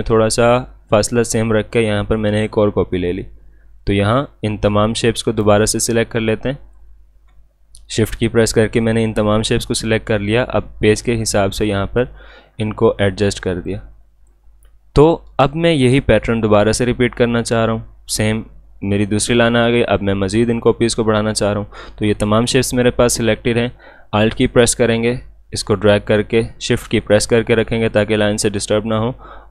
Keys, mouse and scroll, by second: 11.0 shift+Num_Lock, 11.0-13.7 shift+drag, 13.7-16.9 drag, 24.1 click, 25.1-29.5 alt+drag.